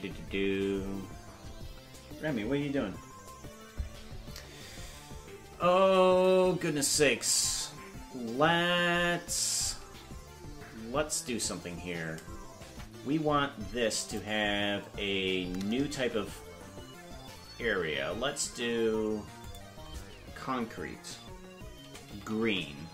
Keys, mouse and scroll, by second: 5.3 scroll up 1, 11.3 Tab, 12.7 Tab, 14.0 click, 19.4-22.9 drag, 22.4 e.